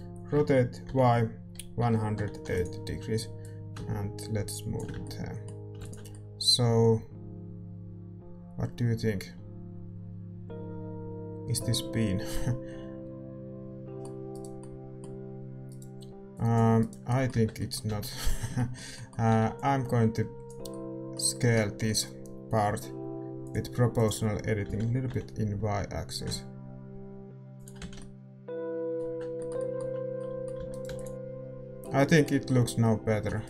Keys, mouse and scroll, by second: 0.3 r, 3.4-6.0 drag, 5.0-8.0 middle drag, 5.0 a, 6.0 ctrl+s, 14.5-16.3 middle drag, 14.5-20.4 right drag, 16.3-18.0 drag, 17.3 Tab, 17.8 z, 18.4 a, 20.4-24.7 middle drag, 20.4 b, 24.7-27.8 drag, 24.7 s, 27.8 z, 27.9-29.7 middle drag, 29.7 Tab, 30.5 a, 31.0 right click, 31.0 x, 31.1 ctrl+s, 31.1 a.